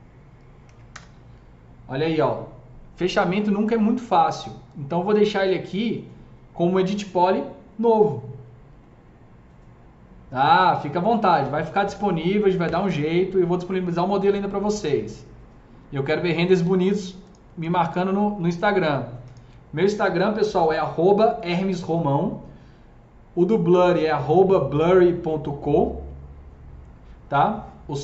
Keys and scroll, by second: 0.0-0.5 typing, 0.7 Return.